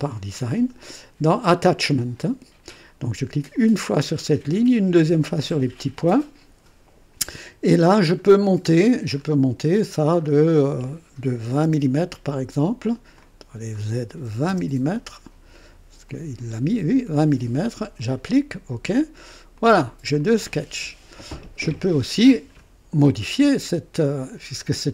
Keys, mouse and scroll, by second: 3.5 click, 5.4 click, 7.9 scroll up 2, 8.7-9.4 scroll up 3, 9.7 scroll up 2, 10.2 scroll up 2, 11.4 KP_2, 11.6 KP_0, 13.1 click, 14.3 KP_2, 14.5 KP_0, 16.1-17.2 drag, 18.0 click, 18.9 click, 19.5 click, 20.0-21.8 typing, 20.1-21.2 drag.